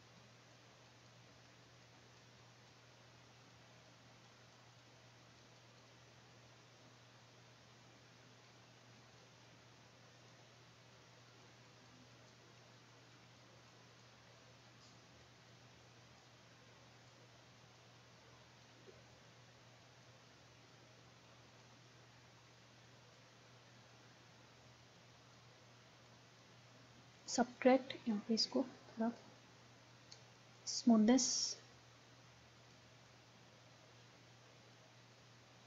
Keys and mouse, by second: 6.5-7.8 middle drag, 10.2-21.2 drag, 21.6-23.5 drag, 23.8-30.1 drag, 30.3 middle click, 30.3-35.6 drag.